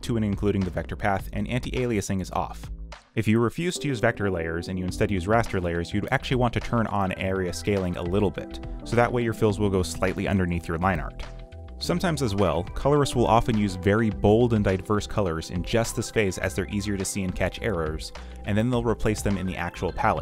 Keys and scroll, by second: 0.0-2.3 typing, 3.8 ., 4.3 space, 4.5 z, 4.8 b, 6.4-9.1 typing, 9.9 ctrl+z, 10.3-15.2 typing, 10.5 ctrl+z, 13.9 ctrl+z, 14.3 ctrl+z, 15.9 ctrl+v, 17.1 space, 17.6 q, 20.0-20.2 typing.